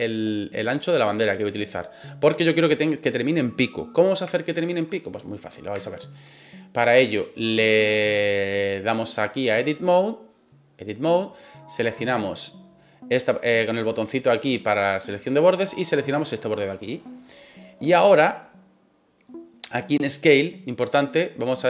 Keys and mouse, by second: 4.4 shift+middle click, 5.0 middle click, 5.8 shift+middle click, 6.2 middle click, 7.6 middle click, 9.3-10.4 drag, 12.3 click, 15.6 right click, 16.1 shift+middle click, 20.1 click, 21.5-21.6 drag.